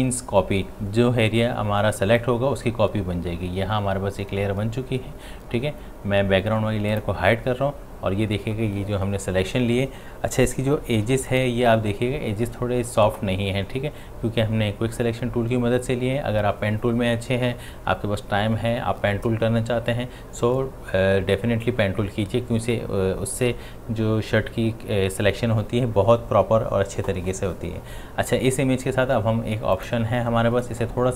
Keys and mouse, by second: 6.9 click, 11.1 space, 11.3 ctrl+click, 29.7 click.